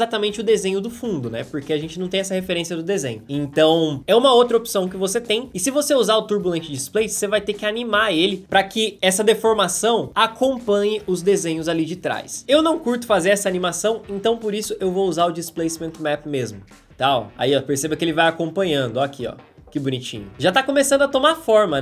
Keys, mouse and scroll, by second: 15.8 space.